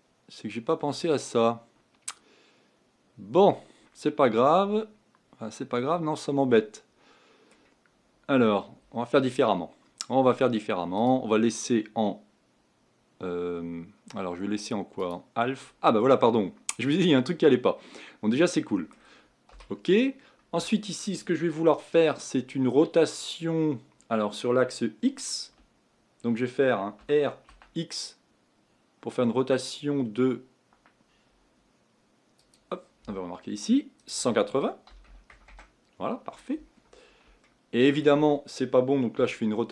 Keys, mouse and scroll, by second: 10.9-16.0 drag, 16.0-19.5 middle drag, 19.5 KP_1, 20.2-23.3 scroll up 2, 27.0 r, 34.0-37.0 drag, 37.4-39.1 shift+middle drag, 39.1 r.